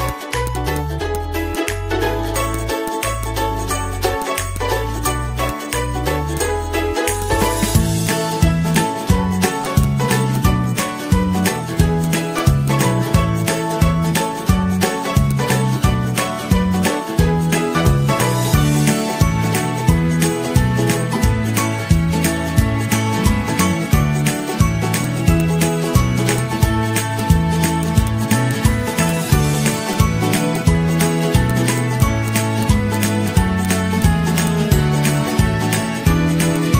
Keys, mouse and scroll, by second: 2.1 ctrl+x, 3.7 ctrl+v, 10.7-11.1 Down, 11.4 ctrl+-, 13.1 Down, 15.1 typing, 15.8 ctrl+a, 16.2-24.5 typing, 35.0-35.5 Up, 35.7 Up, 35.7 ctrl+g.